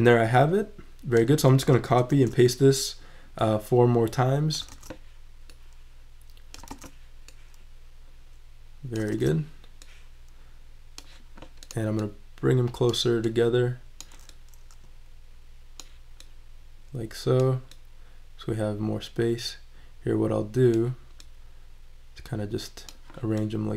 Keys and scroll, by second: 1.9 super+c, 2.1 super+v, 4.7 super+v, 6.7 super+v, 9.1 super+v.